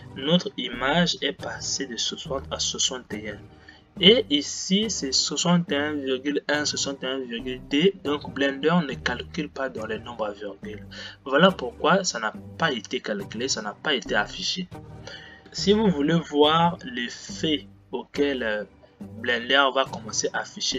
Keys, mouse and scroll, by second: 15.4 click.